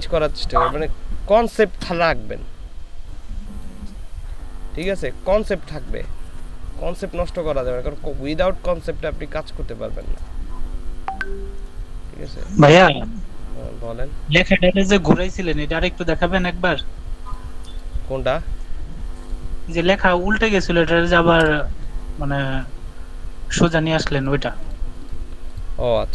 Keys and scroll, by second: 21.4 ctrl+v.